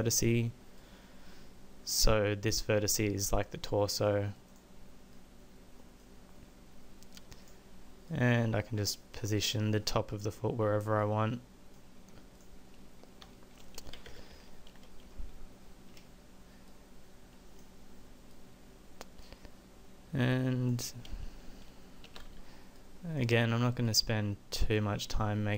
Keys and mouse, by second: 6.4 middle click, 7.4-8.4 middle drag, 9.6 middle click, 12.3 middle click, 14.1 KP_1, 14.3 KP_5, 22.0 a, 22.2 b.